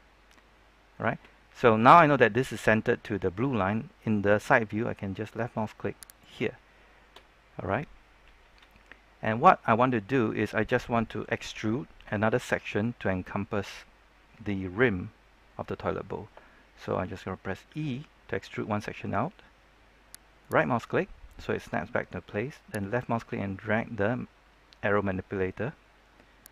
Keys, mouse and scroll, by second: 6.0 click, 17.6 e, 20.4 right click, 23.0-26.5 drag.